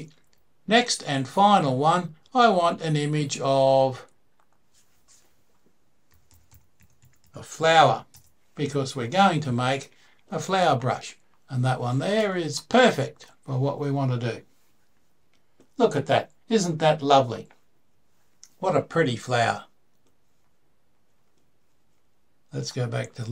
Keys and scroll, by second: 5.7-7.5 typing, 7.9 Return, 9.5-9.9 typing.